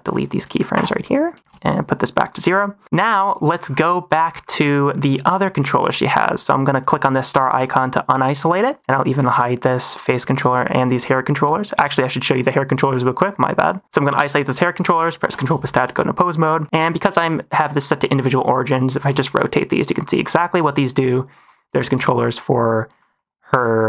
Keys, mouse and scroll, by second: 0.7 Delete, 1.9 click, 4.8 shift+middle drag, 5.2 click, 7.5 click, 8.5 shift+middle click, 9.1 click, 10.4 click, 11.7 click, 12.5 click, 13.5 click, 15.1 ctrl+Tab, 15.5 shift+middle drag, 15.9 middle drag, 16.5 middle click, 16.6 a, 16.9-18.3 drag, 18.9 shift+middle drag, 19.2 r, 20.0 -, 20.1 r, 21.4 -, 21.7 shift+middle drag, 22.1 click, 22.9 middle drag, 23.7 shift+click.